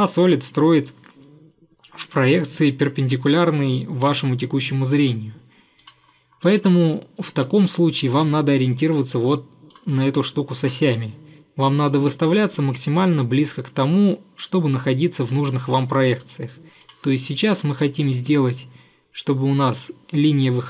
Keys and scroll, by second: 0.3 Delete.